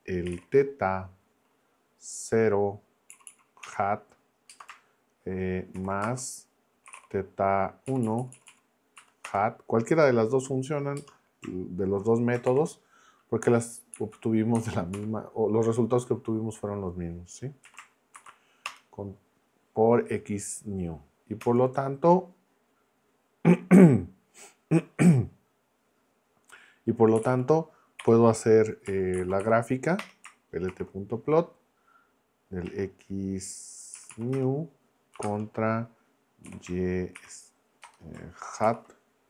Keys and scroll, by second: 0.0-0.8 typing, 3.1 Down, 3.6 Return, 4.5 space, 5.7-7.4 typing, 7.8 Down, 8.6 Down, 9.0 Up, 9.2 Return, 11.0 space, 12.5 shift+8, 13.9 Left, 14.5 BackSpace, 15.0 Right, 17.6 x, 18.1 shift+n, 18.7 Return, 21.4 Return, 26.9-30.7 typing, 30.0 Return, 32.7 x, 34.0 Down, 34.3 Return, 35.2 space, 36.4 y, 37.2 shift+e, 37.8 BackSpace, 38.6 shift+h.